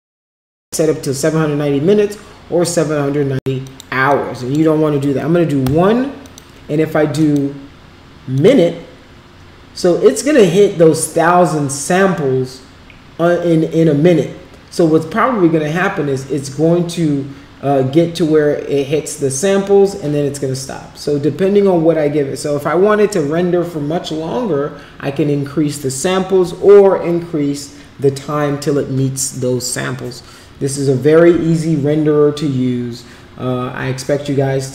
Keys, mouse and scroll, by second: 3.7-4.7 drag, 7.2 click, 8.4 click.